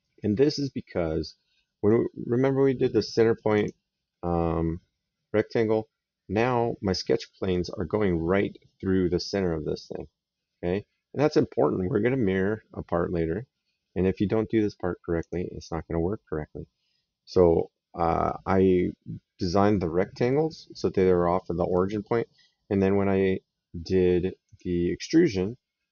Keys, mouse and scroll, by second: 3.4 click, 7.3 right click, 15.0 click, 21.5 right click, 24.3 click.